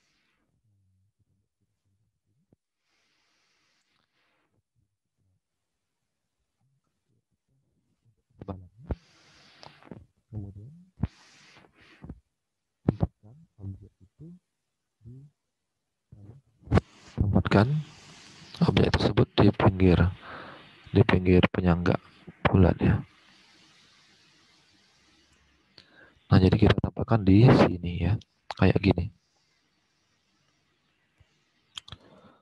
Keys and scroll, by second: 10.0 alt+Tab.